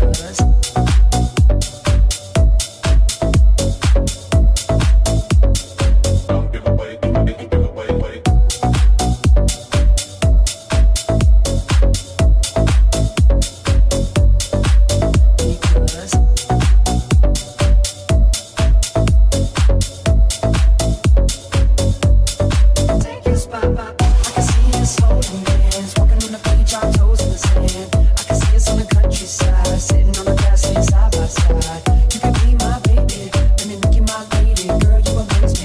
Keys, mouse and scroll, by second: 1.4 shift+a, 2.1 middle click, 2.1 right click, 3.5 shift+middle click, 3.5 shift+right click, 5.1 shift+middle click, 5.1 shift+right click, 5.7 shift+middle click, 5.7 shift+right click, 6.2 shift+middle click, 6.8-34.5 drag, 7.4 right click, 7.4 shift+a, 8.3 alt+shift+right click, 9.9 alt+shift+middle click, 9.9 alt+shift+right click, 10.6 alt+shift+right click, 11.5 alt+shift+right click, 12.2 alt+shift+right click, 13.9 alt+shift+right click, 15.5 shift+right click, 15.7 shift+right click, 16.5 shift+right click, 16.7 shift+middle click, 16.7 shift+right click, 17.8 shift+middle click, 17.8 shift+right click, 18.2 shift+middle click, 18.2 shift+right click, 19.0 shift+right click, 19.2 shift+right click, 20.1 alt+z, 21.1 middle click, 21.1 right click, 21.3 middle click, 21.3 right click, 22.2 shift+middle click, 22.2 shift+right click, 22.4 shift+middle click, 22.4 shift+right click, 23.4 shift+middle click, 23.4 shift+right click, 23.6 shift+middle click, 23.6 shift+right click, 24.6 shift+middle click, 24.6 shift+right click, 24.8 shift+middle click, 24.8 shift+right click, 25.9 shift+middle click, 25.9 shift+right click, 26.1 shift+middle click, 26.1 shift+right click, 27.3 middle click, 27.3 right click, 27.6 middle click, 27.6 right click, 28.4 shift+middle click, 28.4 shift+right click, 28.6 shift+middle click, 28.6 shift+right click, 29.5 shift+middle click, 29.5 shift+right click, 30.2 shift+middle click, 30.2 shift+right click, 34.5-35.6 ctrl+right drag.